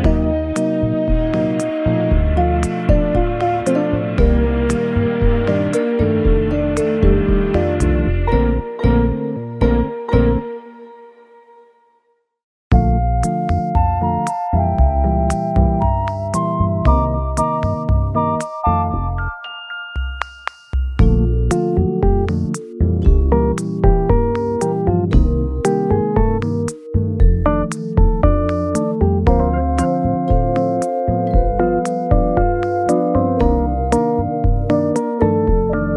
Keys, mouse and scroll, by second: 0.2 middle click, 1.4 Tab, 2.6 Tab, 6.0 x, 6.6 x, 9.2-9.5 scroll down 2, 9.5 scroll up 1, 14.8 scroll up 4, 15.4 middle click, 15.5 ctrl+z, 15.7 ctrl+scroll down 2, 17.2 KP_7, 17.2 KP_7, 18.0 scroll down 2, 18.8 scroll down 1, 19.1 scroll up 1, 24.9-26.2 scroll up 1, 26.4-26.8 scroll up 3, 27.4 middle click, 28.3-28.8 scroll down 4, 29.0 middle click, 30.5 scroll up 3, 31.4 scroll up 3, 32.0 middle click, 33.3 scroll up 1.